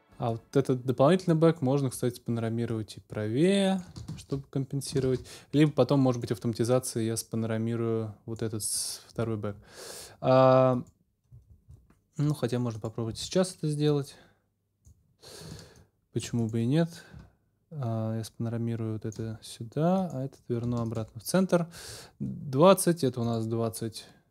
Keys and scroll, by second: 4.1 super+s, 13.1 a.